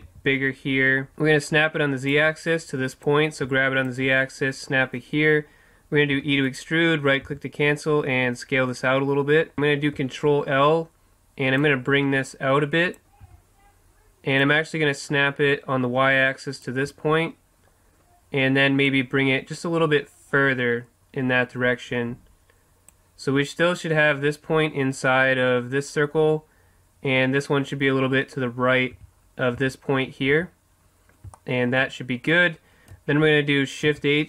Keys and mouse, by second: 0.1 s, 1.1-2.9 drag, 3.1-4.9 drag, 6.2 e, 6.6-8.4 right drag, 7.3 s, 9.5 ctrl+l, 10.2-11.7 middle drag, 11.7-13.6 drag, 13.4 z, 14.6-16.3 drag, 19.0-20.7 drag, 29.0 z, 29.6 z, 30.4 z, 31.5-33.6 middle drag, 34.0 shift+h.